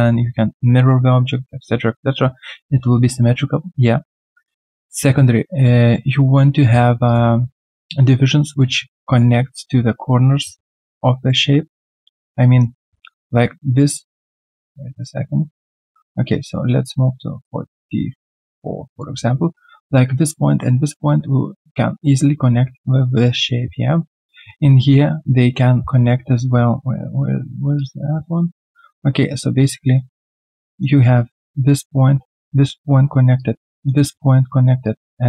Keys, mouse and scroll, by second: 7.5 middle click, 30.0 double click.